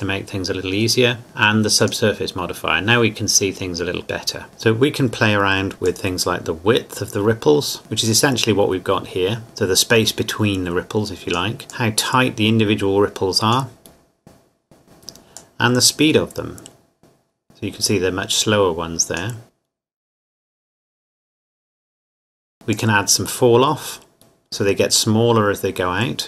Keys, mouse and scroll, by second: 1.8 click, 2.0 click, 3.3 scroll up 1, 5.9 click, 22.7 click.